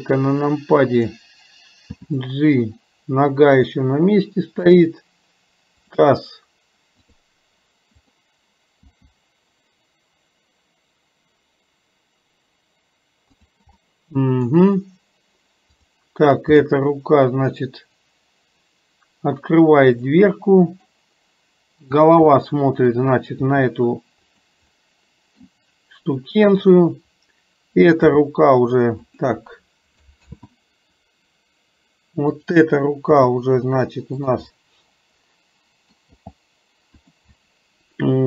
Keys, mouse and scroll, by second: 5.9 click, 7.0 click, 8.1 click, 13.8 middle click, 15.8 click, 20.4 middle click, 22.0 click, 22.4 middle click, 24.9-25.5 middle drag, 26.6 click, 32.3 click, 34.5-36.0 middle drag, 37.5-38.2 middle drag.